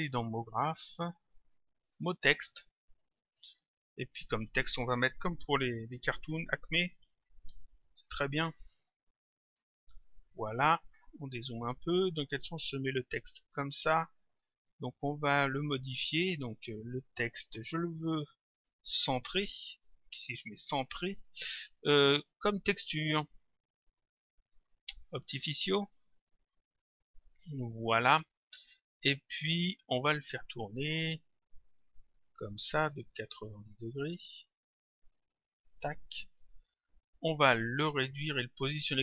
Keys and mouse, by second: 1.9 click, 4.2 click, 6.6-8.0 typing, 9.5 click, 11.9 click, 16.4 click, 18.6 click, 22.2 click, 25.4 click, 29.9 click, 32.0 click, 37.8 click.